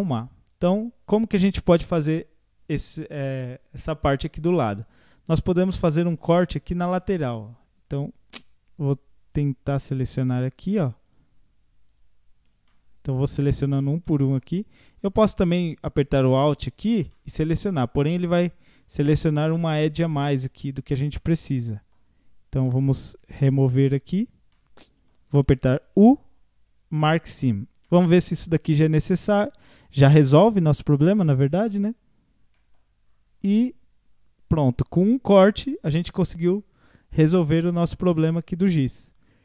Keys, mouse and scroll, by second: 5.6 middle click, 6.5 scroll up 3, 7.0 shift+middle click, 7.6-8.4 scroll down 2, 9.3 click, 10.2 shift+click, 11.1 shift+click, 11.9 shift+click, 12.7 middle click, 13.7 shift+click, 14.1 middle click, 14.9 click, 15.8 alt+shift+click, 16.4 alt+shift+click, 17.1 middle click, 17.7 scroll up 2, 18.4 scroll down 1, 18.8-20.0 middle drag, 20.0 shift+click, 20.7 scroll down 4, 21.1-22.2 middle drag, 22.2 scroll up 2, 22.7-23.8 middle drag, 23.8 shift+click, 24.5-25.9 middle drag, 25.9 u, 27.4 scroll down 1, 27.9 middle click, 28.1 a, 29.4 u, 32.0 scroll down 4, 32.6 middle click, 33.1-33.5 scroll up 1, 33.5-39.4 middle drag.